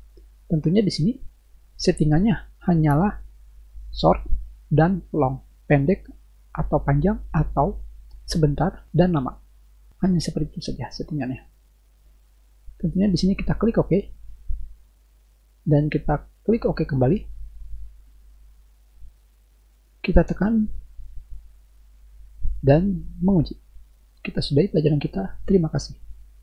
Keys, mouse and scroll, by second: 13.9 click, 17.1 click, 20.4-26.4 drag.